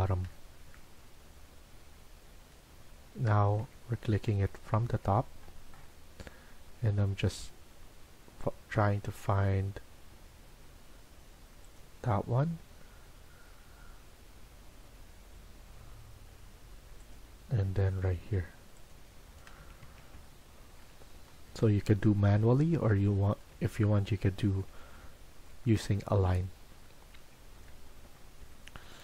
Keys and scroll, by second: 0.1-1.1 typing, 3.5 Tab, 4.1 Tab, 4.7 Tab, 19.5 Escape, 19.7 Escape.